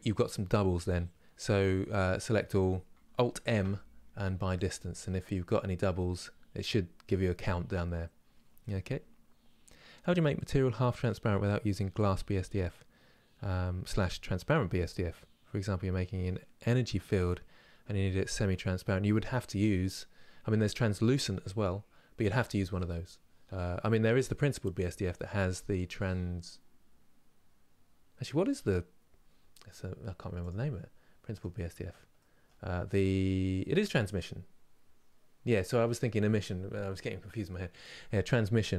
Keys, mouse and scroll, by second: 1.1-1.7 scroll down 1, 1.7 a, 30.1 click, 31.1-38.7 drag.